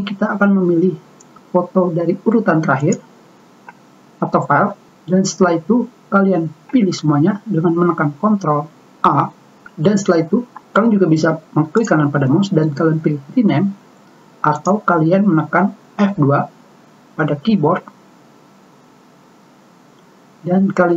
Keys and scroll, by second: 7.5 ctrl+a, 19.1 F2.